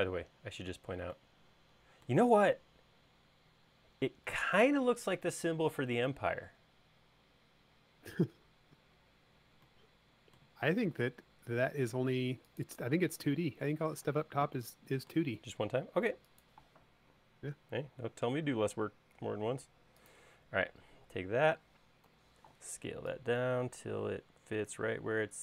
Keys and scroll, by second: 14.0 m, 22.1 s.